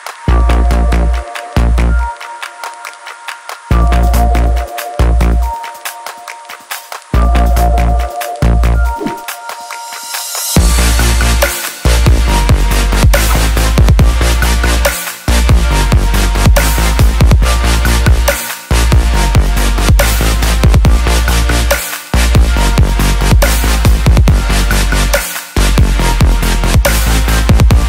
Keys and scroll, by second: 8.7 ctrl+=, 12.9 ctrl+-.